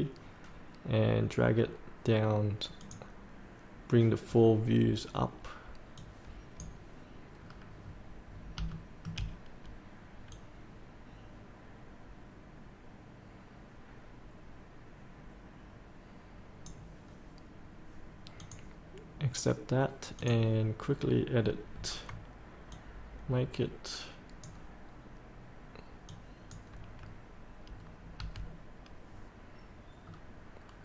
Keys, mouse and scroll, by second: 1.6 scroll up 1, 2.8 click, 7.3 scroll up 1, 7.9 scroll up 1, 8.7 shift+middle click, 10.3-24.9 drag, 27.8 scroll down 1, 28.9 scroll up 1, 30.0 scroll down 1.